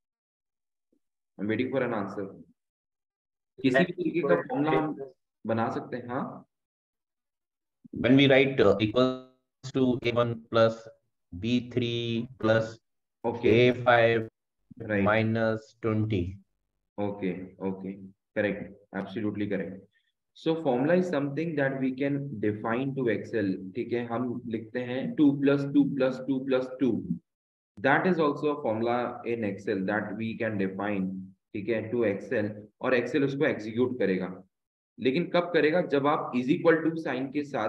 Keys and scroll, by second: 2.6 typing.